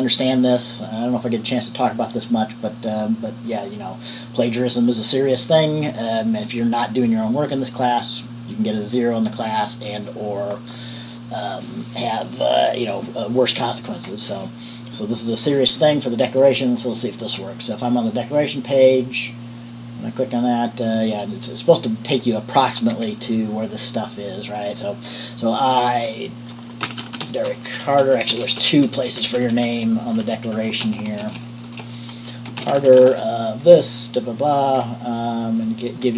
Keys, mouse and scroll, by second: 23.1-25.7 scroll down 1, 25.7 click, 27.0-28.8 typing, 28.1 Right, 28.2 Right, 29.8 Right, 30.0 Right, 30.3 Right, 30.4 Right, 30.7 Right, 31.5-35.4 typing.